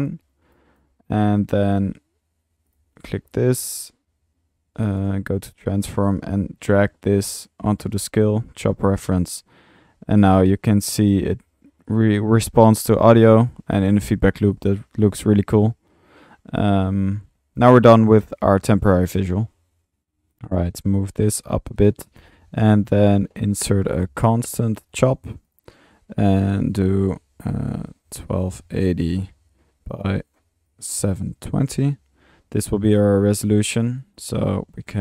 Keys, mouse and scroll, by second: 9.8 space, 10.6 click, 11.7 click, 13.2 middle click, 13.7-14.2 drag, 14.5 middle click, 14.5 click, 18.9 click, 20.4-21.5 shift+drag, 21.8-22.1 drag, 22.3 Tab, 23.3-24.4 typing, 24.9 drag, 25.5 click, 26.3-26.9 drag, 29.9-31.1 drag, 33.1-33.4 drag, 33.4 middle click, 33.8 click, 34.4 Tab.